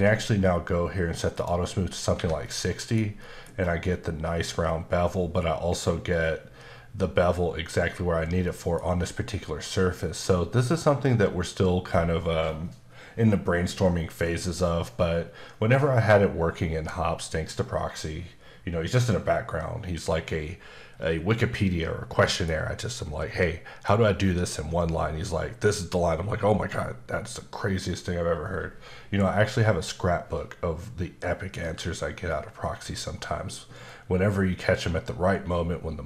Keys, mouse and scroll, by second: 1.3 click, 2.1 Escape, 2.4 middle click, 3.2 middle click, 3.6 scroll, 3.6-5.7 scroll up 1, 8.1 scroll down 1, 8.4 middle click, 9.7 middle click, 14.5 middle click, 33.8 middle click.